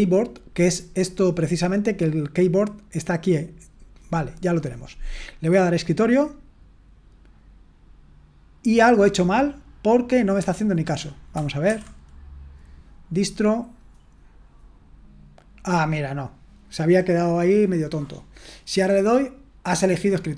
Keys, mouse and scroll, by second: 4.1 click, 5.5-11.0 drag, 13.6-14.7 drag, 19.0-20.3 drag.